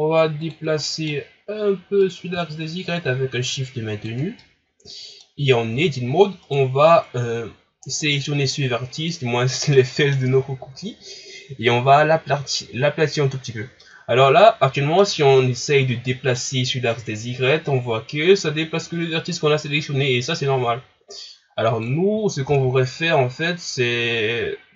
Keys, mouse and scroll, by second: 0.4 click, 0.8-2.0 middle drag, 2.0-4.4 drag, 4.4-5.5 middle drag, 5.5 scroll up 2, 5.7 Tab, 6.4 right click, 8.1-12.7 middle drag, 13.8-16.4 middle drag, 16.4-19.4 drag, 22.5 ctrl+z.